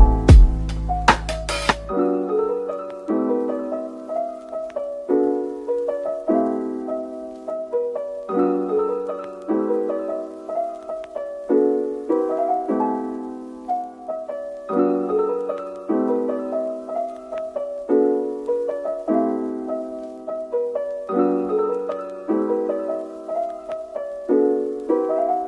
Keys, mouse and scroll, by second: 0.2-0.5 scroll up 1, 0.6 shift+click, 1.6 /, 2.0 scroll up 1, 7.0-7.7 scroll down 1, 8.4-9.7 scroll up 1, 9.7-10.2 scroll down 1, 10.2 scroll up 1, 13.0 Tab, 14.8 shift+click, 15.1 shift+double click, 15.8 ctrl+l, 19.7 double click, 21.9 shift+click, 22.6 ctrl+l, 23.9 shift+click.